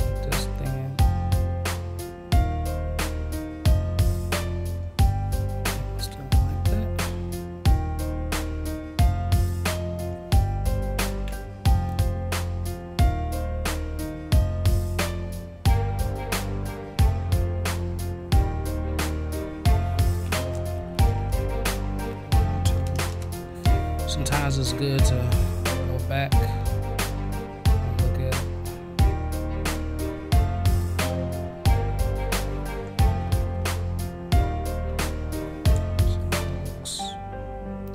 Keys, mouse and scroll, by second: 6.1 ctrl+z, 8.2-10.1 drag, 11.2 ctrl+z, 12.7-18.5 drag, 20.2 ctrl+z, 25.2-31.4 drag, 37.8 click.